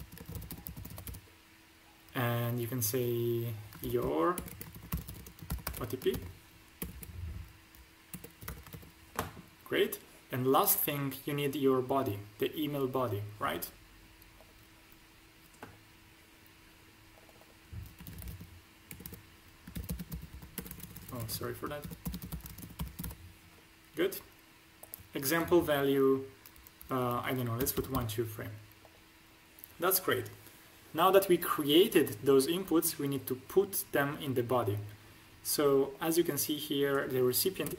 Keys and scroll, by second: 0.0-1.0 typing, 3.7-6.7 typing, 8.0 BackSpace, 8.3 t, 8.6 shift+1, 18.0-20.5 typing, 21.8-22.9 typing, 24.0 y, 27.5 1, 27.7 2, 27.9 3, 37.6 BackSpace.